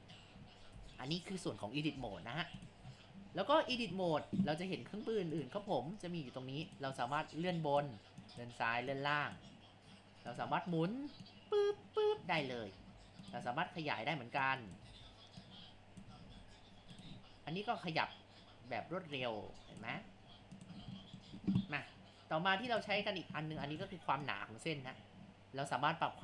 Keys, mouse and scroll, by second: 0.1-0.4 scroll down 4, 0.4 scroll up 1, 0.5 scroll, 2.8-3.1 scroll down 6, 3.4-3.7 scroll up 3, 3.7 a, 5.3 click, 6.7-7.8 drag, 8.2 click, 10.3 click, 12.8 ctrl+z, 13.3-14.5 drag, 14.9 ctrl+z, 15.4 click, 16.3 ctrl+z, 16.9-19.4 drag, 21.0-22.7 shift+middle drag, 22.7 click.